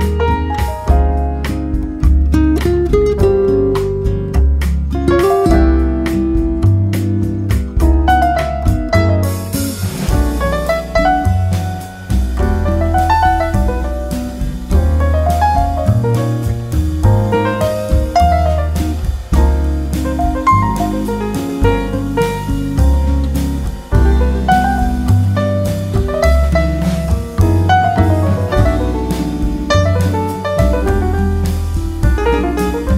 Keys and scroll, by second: 1.2 ctrl+v, 2.8 ctrl+v, 5.6 ctrl+v, 28.5 Right, 29.7 Left.